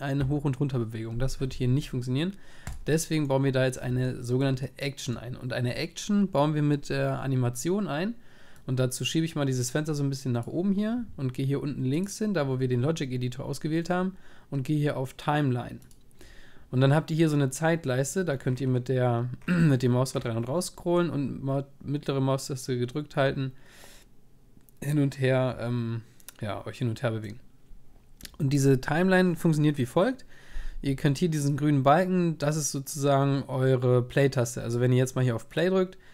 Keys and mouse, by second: 3.3 click, 3.5 middle click, 3.7 middle click, 4.1 click, 8.7-15.9 drag, 18.1-19.4 middle drag, 19.4 click, 19.6 middle click, 19.7 click, 19.8 middle click, 19.9 click, 20.0 middle click, 20.2-21.8 drag, 21.8 middle click, 22.3 click, 22.4 middle click.